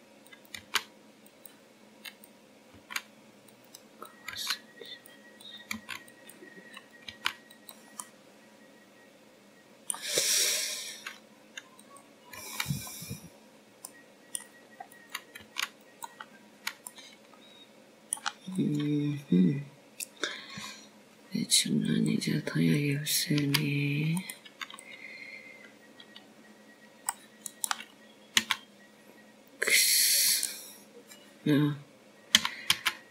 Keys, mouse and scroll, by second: 0.5 click, 0.8 g, 1.9 click, 2.3 g, 3.1 click, 3.5 g, 4.9 click, 5.6 g, 6.9 click, 7.2 g, 8.4 click, 8.6 g, 9.7 click, 10.0 g, 10.9 middle click, 13.8 click, 14.7 click, 15.3 g, 16.1-16.7 scroll down 2, 16.7 middle click, 17.8 click, 18.3 g, 19.1-19.5 scroll down 3, 19.8 middle click, 21.4 click, 24.8 click, 25.6 click, 26.2 c, 31.2 s.